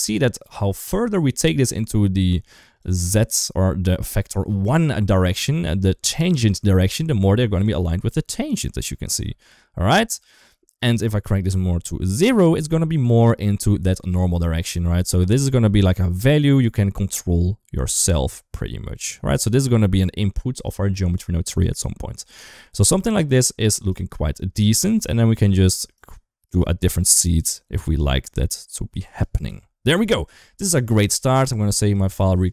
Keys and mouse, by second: 1.0-2.6 drag, 6.5 shift+middle click, 7.6-8.4 middle drag, 9.0 KP_2, 9.3 KP_1, 11.2-13.7 drag, 14.4-20.0 drag, 20.5-23.8 drag, 24.2 shift+middle click, 25.8 click, 26.3 click, 26.9 click, 27.7-28.7 middle drag, 29.3 KP_1, 30.3 shift+middle drag, 30.9 ctrl+s.